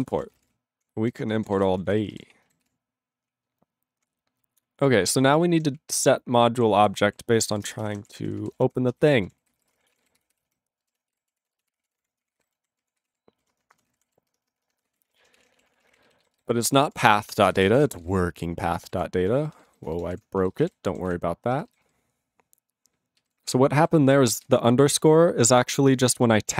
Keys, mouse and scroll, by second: 0.0 ctrl+space, 0.0 ctrl+e, 0.1 ctrl+n, 0.3 ctrl+n, 0.3 ctrl+e, 0.4 ctrl+g, 0.5 ctrl+p, 1.2 ctrl+p, 1.5 ctrl+s, 1.6 ctrl+space, 1.7 ctrl+n, 1.8 ctrl+n, 1.9 ctrl+n, 2.1 ctrl+g, 2.1 ctrl+e, 2.6 ctrl+s, 3.2-4.0 ctrl+p, 4.3-5.1 ctrl+n, 5.5 ctrl+a, 5.7-6.6 ctrl+p, 6.8 ctrl+n, 6.9 ctrl+n, 7.0 ctrl+e, 7.5 ctrl+s, 7.6-14.7 typing, 15.9 ctrl+e, 15.9 ;, 16.2 alt+b, 16.2 alt+b, 16.3 alt+b, 16.8 alt+d, 18.0 alt+p, 19.0 alt+n, 19.5 ctrl+b, 20.0 ctrl+b, 20.1 space, 20.2 space, 20.4 ctrl+a, 20.5 ctrl+e, 20.6 ctrl+g, 21.1 ctrl+s, 21.8 alt+b, 21.8 alt+b, 23.1 alt+b, 23.7 ctrl+b, 24.3 ctrl+space, 24.4 ctrl+f, 24.9 ctrl+g, 26.0 ctrl+o, 26.0 Tab.